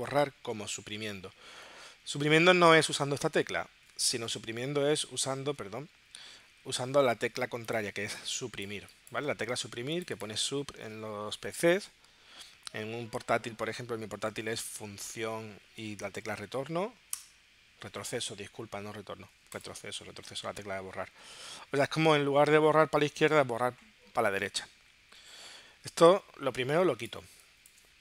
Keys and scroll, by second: 3.0 BackSpace, 8.0 space.